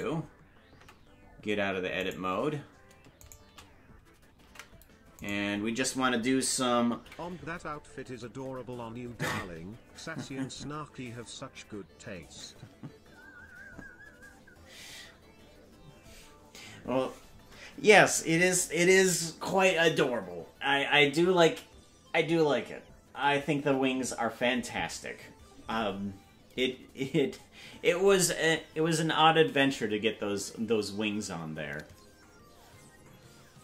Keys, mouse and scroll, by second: 1.1 Tab, 2.0 right click, 3.2 shift+right click, 4.4 ctrl+Tab, 5.2 right click, 6.9 ctrl+p.